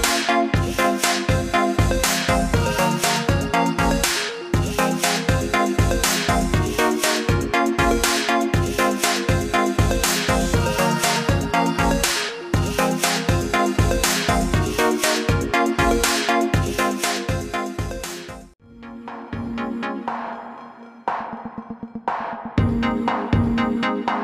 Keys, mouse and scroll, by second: 6.1 alt+click, 7.4 shift+click, 8.8 click, 11.8 shift+click, 16.1 click, 19.8 click, 22.2 click.